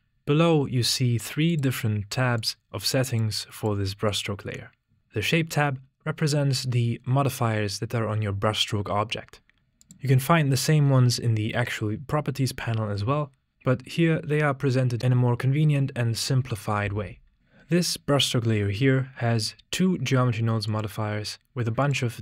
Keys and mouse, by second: 1.8 click, 2.4 click, 3.1 drag, 3.6 drag, 4.2 click, 20.8 click, 21.9 click.